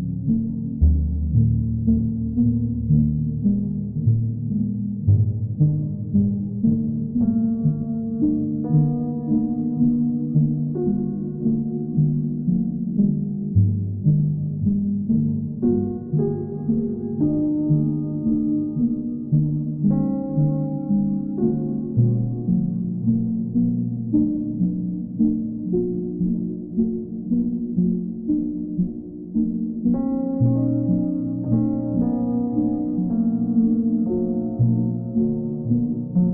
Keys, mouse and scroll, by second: 2.9 click, 3.8 click, 5.4 click, 7.0 click, 9.6 click, 12.7 click, 14.5 click, 15.1 alt+click, 16.7 alt+click, 24.1 click, 29.6 click, 32.6 alt+click, 33.4 click, 34.7 right click.